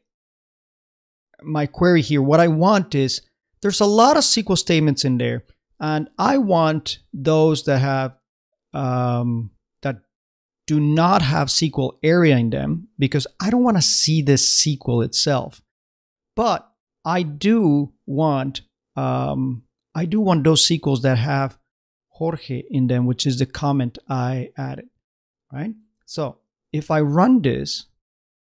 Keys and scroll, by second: 25.8 super+Tab, 27.8-28.4 typing.